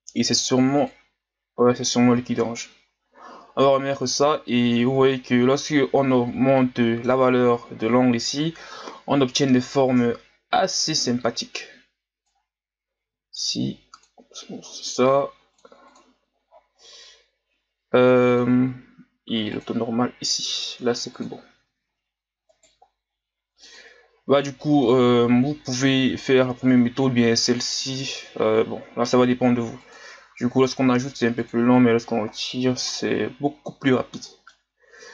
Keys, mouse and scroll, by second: 0.8-6.3 drag, 6.3 scroll down 1, 6.6-8.4 middle drag, 8.4-11.5 drag, 13.1 w, 15.6 click, 16.5-17.4 scroll down 6, 18.3-18.7 drag, 18.7-19.7 scroll down 4, 19.7-20.4 drag, 21.1 click, 21.8-22.5 scroll up 1, 22.5 right click, 23.7 click, 24.5-27.5 middle drag, 30.3 click, 32.2 scroll down 1, 32.3-34.8 middle drag, 34.8-35.1 scroll down 2.